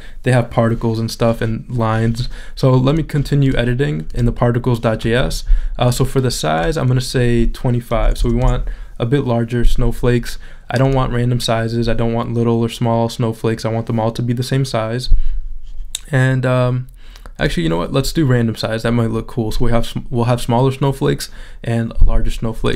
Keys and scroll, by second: 8.0 2.